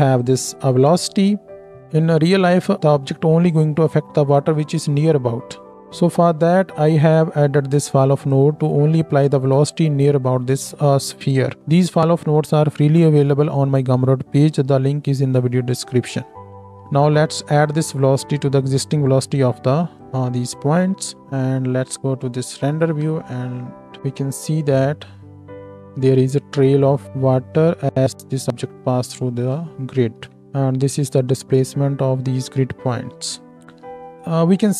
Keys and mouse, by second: 0.2-1.7 drag, 1.7-5.7 middle drag, 5.7-21.2 drag, 16.7-21.2 ctrl+middle drag, 16.7-21.2 ctrl+right drag, 21.2 z, 23.0 shift+Left, 24.0 space, 29.5 space, 30.1 z, 30.4 space, 33.6-34.7 drag.